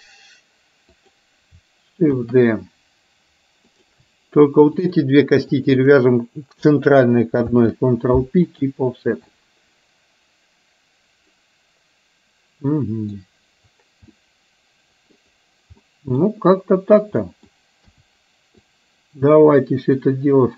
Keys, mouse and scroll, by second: 2.3 shift+d, 4.9 shift+click, 5.6 shift+click, 7.9 ctrl+p, 9.4-13.3 middle drag, 14.4 middle click, 15.9 middle click, 17.3 middle click, 17.8 KP_1, 18.8-20.0 drag.